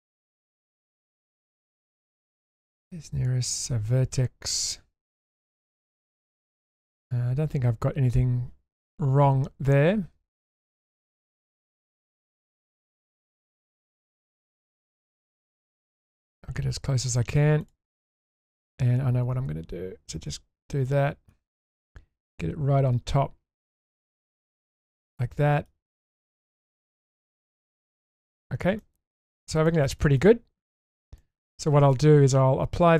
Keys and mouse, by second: 0.1 click, 0.6-12.4 drag, 13.8 click, 16.1 click, 17.6 click, 18.4-20.3 drag, 20.9-21.3 middle drag, 22.0 click, 22.3 click, 24.5-24.9 shift+middle drag, 25.1-25.7 middle drag, 25.9 shift+middle drag, 26.3 shift+middle click, 26.9-27.9 middle drag, 28.8-29.1 middle drag, 29.7 shift+middle click, 30.0 middle click, 30.4 Tab, 31.2-31.9 middle drag.